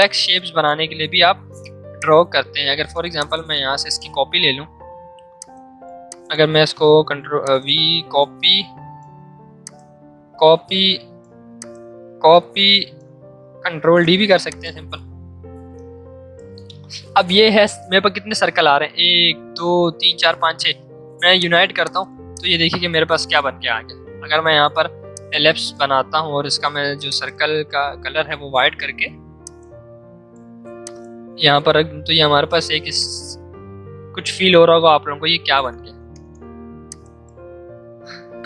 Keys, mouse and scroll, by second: 1.2 v, 1.9 alt+click, 6.7 v, 7.4-9.5 alt+drag, 9.5-11.5 alt+drag, 11.5-13.7 alt+drag, 13.7 ctrl+d, 14.4-18.5 drag, 21.3 click, 24.4 l, 25.1-26.7 shift+drag, 27.1 click, 28.0 v, 29.4-32.9 shift+drag, 35.1 ctrl+z, 36.9 click, 38.1 ctrl+2.